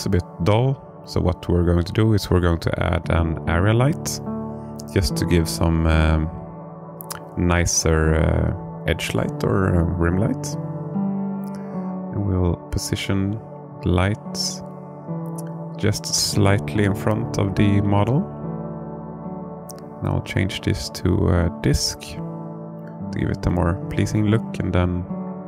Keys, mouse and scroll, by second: 0.8 shift+a, 8.0 g, 9.5 click, 10.7 r, 12.0 click, 14.0 click, 14.9-16.0 alt+middle drag, 17.2 s, 18.8 click, 20.6 click, 23.6-25.0 drag.